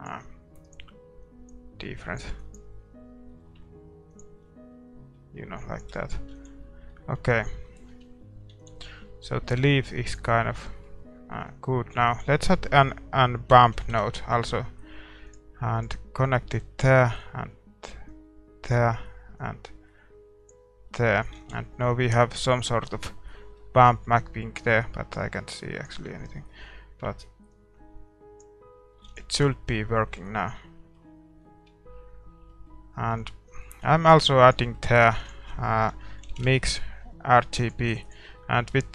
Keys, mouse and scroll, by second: 3.0 scroll down 1, 3.3-5.7 middle drag, 6.3 ctrl+s, 6.9-16.8 middle drag, 7.9 Tab, 8.5 ctrl+s, 16.8-21.3 drag, 20.9-25.3 middle drag, 21.4 ctrl+s, 24.7-26.5 drag, 26.4-28.5 middle drag, 28.5 click, 29.0 ctrl+s, 29.6-38.0 middle drag, 38.0 shift+a, 38.5-38.9 middle drag.